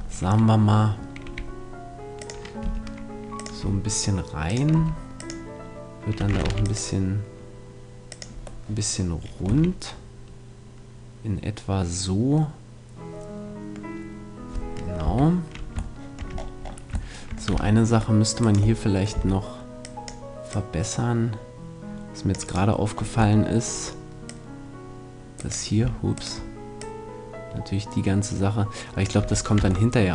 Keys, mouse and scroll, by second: 1.3 e, 2.3-7.1 drag, 2.7 g, 3.6 r, 4.8 s, 6.4 ctrl+r, 8.2-10.5 drag, 9.5 a, 15.0 KP_3, 16.0-17.5 middle drag, 17.5 c, 18.5 click, 18.5-20.5 middle drag, 19.1 c, 22.9-24.3 middle drag, 24.3-26.1 drag, 26.1-28.0 right drag, 26.8-28.6 drag, 29.2 a, 29.3 middle click, 29.6 Tab.